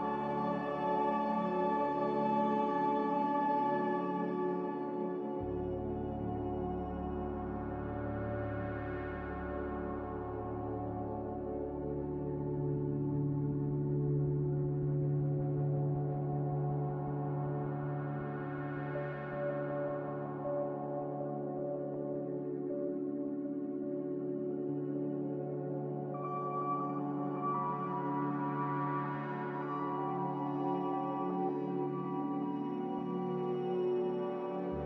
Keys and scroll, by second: 1.1-3.2 typing, 13.1-14.0 typing, 16.8 1, 19.3 4, 19.7 Return, 19.7 0, 22.8 3, 24.1-25.8 typing.